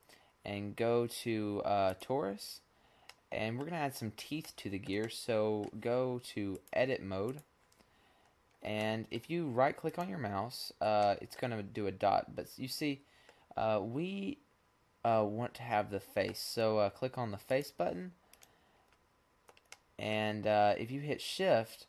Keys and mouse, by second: 2.6-4.3 middle drag, 4.7-6.5 middle drag, 8.6 middle click, 8.7 middle click, 11.6 middle click, 12.9-14.5 middle drag, 17.0 click, 18.3 middle click, 18.8 click, 18.8 right click, 19.4-21.8 middle drag.